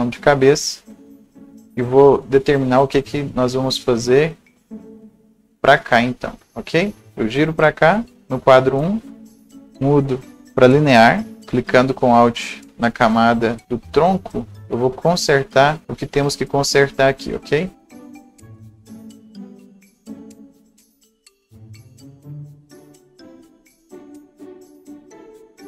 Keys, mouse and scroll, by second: 1.9-6.4 right drag, 2.2 click, 3.2-3.6 scroll up 1, 4.4-11.4 drag, 6.4-8.2 scroll up 1, 9.5 right click, 12.8 alt+double right click, 15.3 click, 15.8-17.0 scroll up 1, 17.6 click, 18.0-21.0 alt+drag, 20.7 scroll down 1, 20.8 right click, 21.0 scroll up 1, 21.6-23.6 drag, 23.3 scroll down 1, 23.3 scroll up 1, 23.6-25.6 drag.